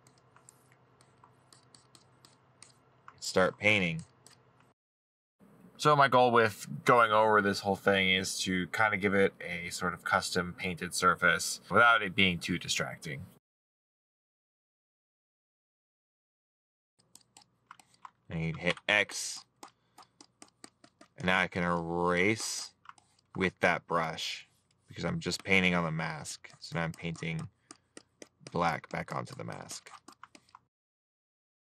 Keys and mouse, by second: 1.2 middle click, 3.9 middle click, 5.3 middle click, 6.3 middle click, 7.6 middle click, 9.1 middle click, 9.6 right click, 11.2 middle click, 12.1 middle click, 12.8 middle click, 14.4 middle click, 15.9 middle click, 16.8 middle click, 24.8 middle click.